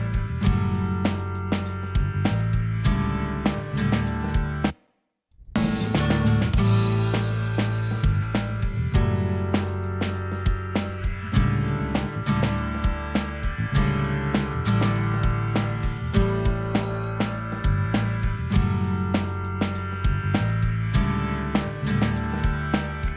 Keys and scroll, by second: 4.4 space.